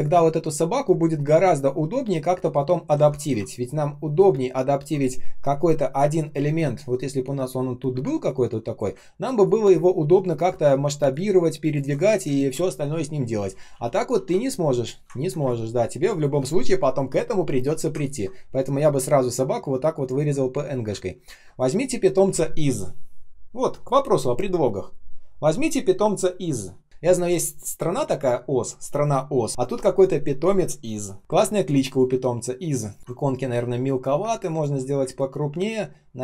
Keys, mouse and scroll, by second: 1.2 shift+click, 3.1 ctrl+я, 9.1-10.1 ctrl+scroll down 1, 11.0 shift+click, 12.3 ctrl+z, 15.1 ctrl+scroll down 1, 15.3 space, 15.8 space, 15.9 space, 17.9-19.0 ctrl+scroll up 1, 20.9 ctrl+scroll up 1, 21.3 space, 21.8 space, 32.0 space, 32.5 space, 32.5 space, 33.0 ctrl+scroll up 1, 33.1 shift+0, 34.2 space, 34.9 space, 35.4 space, 35.4 space.